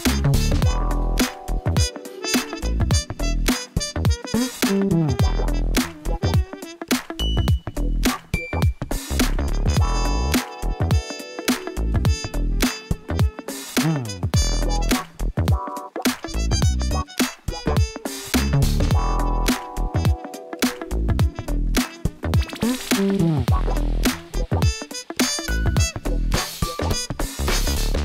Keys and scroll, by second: 0.8-5.1 typing, 6.4 g, 8.3 g, 9.1 7, 12.0 g, 14.2 g, 15.7 g, 16.6 g, 17.8 g, 18.8 g, 19.3 g, 24.5 Tab, 26.6 ctrl+z.